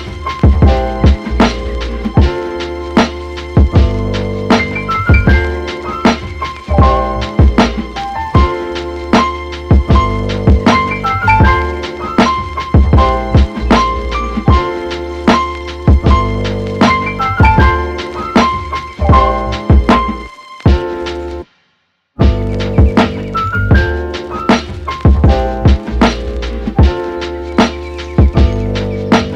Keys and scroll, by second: 11.5 super+z, 20.4 super+z.